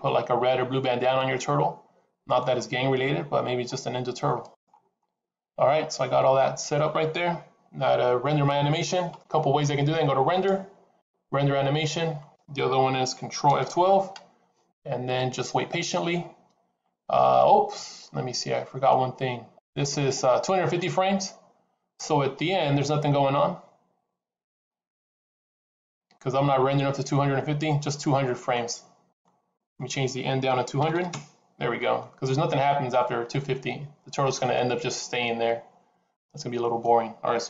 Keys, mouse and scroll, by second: 3.2-4.2 scroll up 3, 4.3 click, 4.3-5.0 scroll up 6, 10.2 click, 13.9 ctrl+F12, 24.4 click, 29.4 click, 30.8 KP_0, 32.9 click.